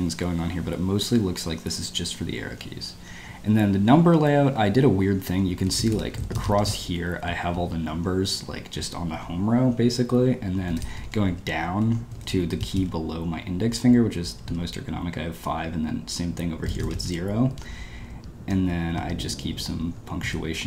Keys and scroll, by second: 2.9 Escape, 3.0 j, 3.2 j, 4.4 Escape, 4.5-8.2 typing, 10.4-13.2 typing, 14.3 typing, 16.3-16.8 typing, 18.4 Return, 19.0 Escape, 19.1-20.2 typing.